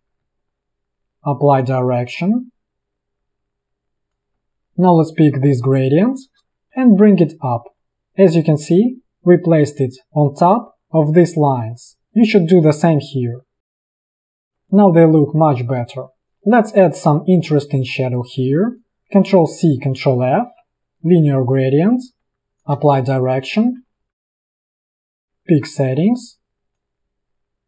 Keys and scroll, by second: 4.4 a, 6.8 ctrl+], 7.9 ctrl+[, 8.6 ctrl+], 13.9 ctrl+], 16.0 space, 19.7 ctrl+c, 20.3 ctrl+f, 22.9 space, 23.5 v, 23.9 i, 25.0 v, 25.2 space, 26.1 g.